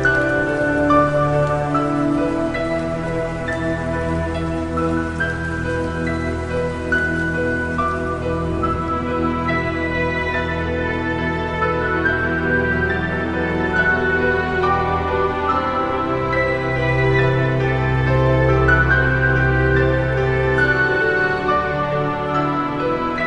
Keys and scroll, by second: 1.1-3.5 typing, 4.9 i, 5.5 i, 6.4 i, 7.8 i, 8.7 i, 9.3 -, 11.0 i, 13.0 -, 13.8 +, 14.2 +.